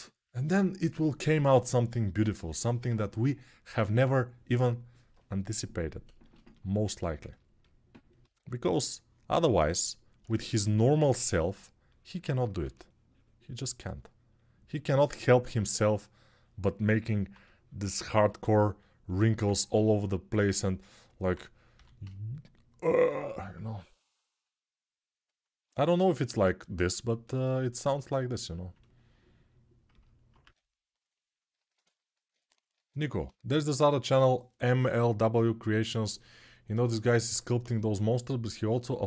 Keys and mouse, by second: 8.1 1, 12.4 3, 15.4-20.8 right drag, 20.8-39.0 drag, 21.5 g, 30.2 1.